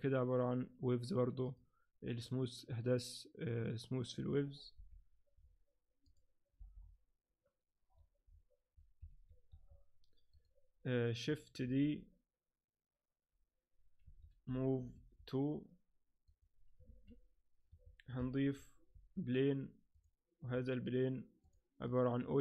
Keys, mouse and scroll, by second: 1.5 click, 4.7 t, 5.4-5.9 scroll down 1, 5.9 scroll down 4, 6.0 click, 6.6 t, 6.8-7.3 scroll up 2, 7.7 scroll up 1, 7.9-8.3 scroll down 1, 8.5-9.1 scroll down 1, 9.1 Escape, 9.5 Escape, 9.5 scroll up 1, 10.4 right click, 11.7 shift+d, 14.4 m, 16.3 click, 16.8 alt+a, 17.7 Escape, 18.4 shift+c, 18.9 shift+a, 20.5-21.4 scroll down 5, 21.4 click, 21.9 click.